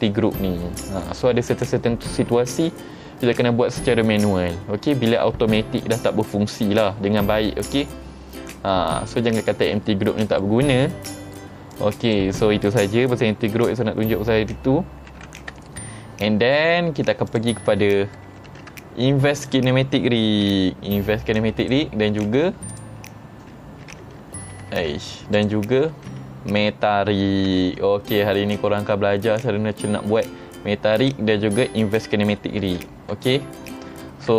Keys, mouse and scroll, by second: 8.8 middle click, 9.9 middle click, 10.9 scroll down 3, 11.2 middle drag, 11.8 click, 15.2 h, 15.7-16.6 middle drag, 17.4 click, 18.6 ctrl+Tab, 19.5 click, 20.6 g, 21.7 right click, 22.4 ctrl+Tab, 22.8 click, 23.2 middle click, 23.2 scroll down 3, 24.1 ctrl+Tab, 24.8 ctrl+Tab, 25.4 click, 26.0 ctrl+Tab, 27.6 g, 31.1 right click, 32.7 ctrl+Tab, 33.3-33.8 middle drag, 34.1 shift+middle drag.